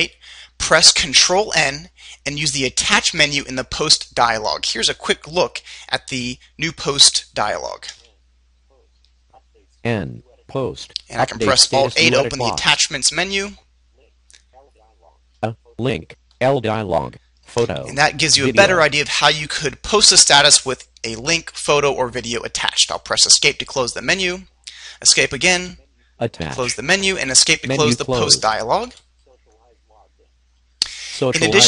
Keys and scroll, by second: 7.4 ctrl+n, 12.9 alt+a, 15.3 Down, 16.4 Down, 24.0 Escape, 25.5 Escape, 29.1 Escape.